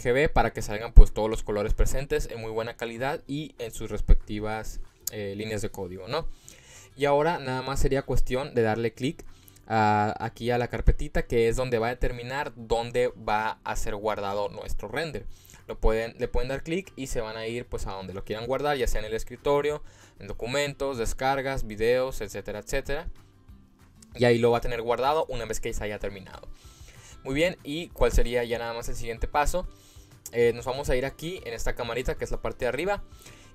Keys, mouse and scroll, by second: 16.1 click, 28.0 click, 33.2-33.5 drag.